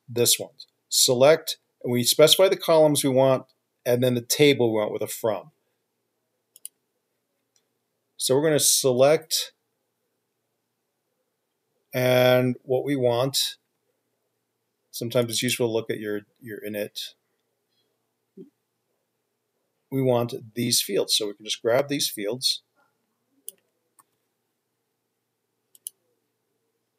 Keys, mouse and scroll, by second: 15.8 double click, 24.4-26.0 typing.